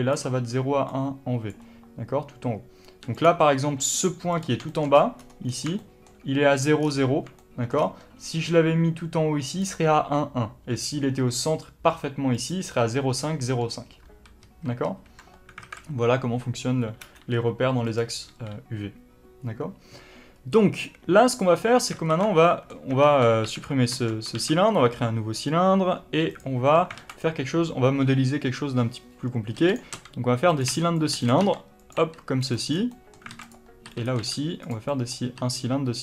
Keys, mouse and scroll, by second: 0.0 d, 1.4 d, 4.2 click, 4.6-9.4 shift+middle drag, 4.8-5.4 scroll up 2, 5.4-5.7 scroll down 2, 6.7-7.3 scroll down 2, 7.7-8.1 scroll down 2, 8.1 g, 9.4 click, 10.6 g, 12.4 click, 14.3 ctrl+z, 15.5 alt+a, 17.8-21.3 drag, 18.2 n, 20.2-21.3 scroll up 1, 21.3-26.5 middle drag, 22.0 alt+a, 22.8 Tab, 24.2 shift+a, 26.5 Tab, 26.9 alt+a, 27.0 click, 27.7-29.5 scroll up 1, 29.5-31.3 typing, 29.7 click, 30.5 click, 31.0 click, 31.2 click, 31.8 click, 32.4 click, 32.6 scroll down 1, 32.8 middle click, 33.2 alt+a, 33.3 click, 33.7 e, 33.9 click, 34.1 s, 34.6 click, 34.8-36.0 middle drag, 35.3 e.